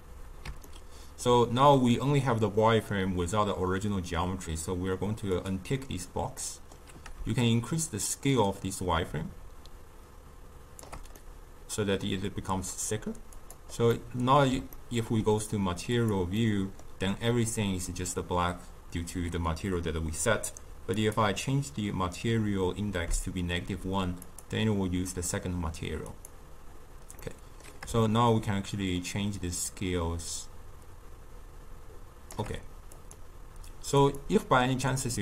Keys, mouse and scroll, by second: 0.6-4.8 ctrl+middle drag, 5.3 click, 6.3-7.4 middle drag, 7.4-10.5 shift+drag, 11.1-13.3 middle drag, 13.3 click, 13.8-15.8 middle drag, 15.8 click, 16.3-19.5 middle drag, 20.9-23.9 drag, 24.2 click, 26.1 click, 27.1-28.1 middle drag, 28.1-31.1 shift+drag, 32.9-34.2 drag.